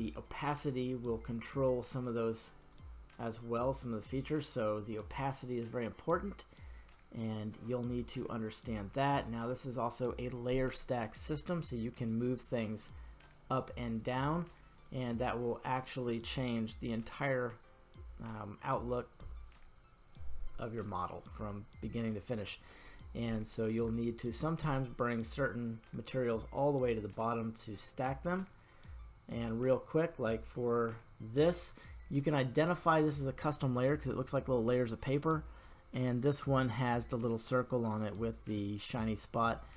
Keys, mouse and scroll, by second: 0.1-2.0 drag, 2.6 click, 3.7-7.7 drag, 11.9 click, 14.7 click, 22.1 middle click, 23.3-23.8 middle drag, 24.0-24.7 shift+middle drag, 28.5 click, 30.7 click.